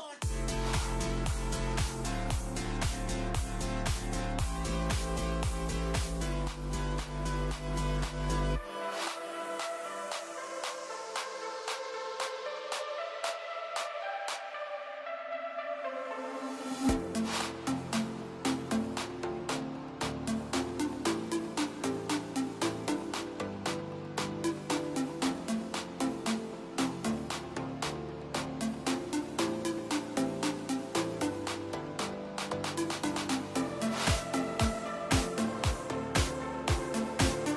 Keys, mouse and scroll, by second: 3.1-5.7 drag, 7.8 KP_Subtract, 9.4 click, 10.8 ctrl+z, 11.7-12.4 scroll down 1, 12.4-14.9 shift+middle drag, 15.3 KP_Subtract, 16.3-18.9 scroll up 1, 25.1-26.1 middle drag, 26.1-26.6 scroll down 2, 26.6-27.6 middle drag, 27.6 Tab, 28.2 click, 29.0 click, 29.9 click, 30.7 click, 31.6 click, 37.3 click.